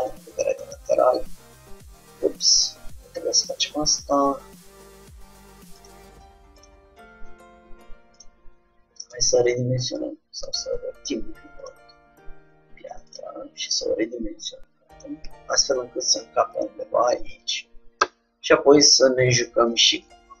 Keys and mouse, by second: 0.2-1.8 drag, 1.4 shift+d, 4.4 ctrl+z, 5.9-8.4 drag, 7.1 g, 9.2 r, 10.5 r, 12.4 r, 13.8 s, 15.3 g, 18.2 Tab, 19.8-20.4 drag.